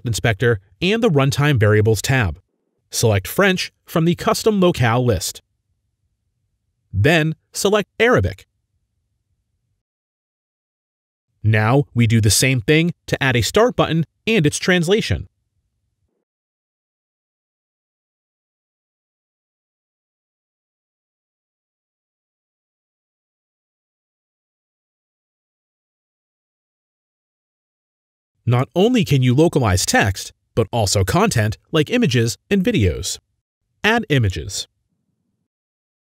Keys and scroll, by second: 3.4-4.2 typing, 8.6 typing, 11.6 typing, 18.4-21.2 typing, 22.3-23.9 typing, 24.1 ctrl+c, 24.4 ctrl+v, 24.7 ctrl+v, 24.7 ctrl+c, 26.2-28.1 typing.